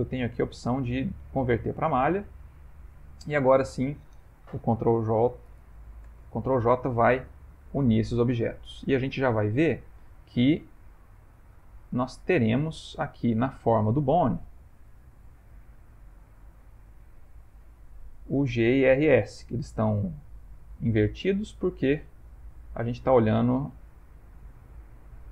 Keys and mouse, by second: 3.4 shift+click, 4.7 ctrl+j, 6.1 Tab, 7.3 ctrl+middle click, 7.8 ctrl+middle click, 8.7 Tab, 9.1 middle click, 10.8 middle click, 11.7 middle click, 12.6 shift+middle click, 12.7 shift+middle click, 13.2 ctrl+middle click, 13.4 ctrl+middle click, 13.8 shift+middle click, 14.3 shift+middle click, 14.5 shift+middle click, 15.0 ctrl+middle click, 16.3 shift+middle click, 17.2 ctrl+middle click, 19.2 middle click, 20.0 middle click, 20.7 middle click, 21.2 ctrl+middle click, 21.9 middle click, 22.3 ctrl+middle click, 22.7 ctrl+middle click, 23.2 middle click, 24.0 ctrl+middle click, 25.0 ctrl+middle click.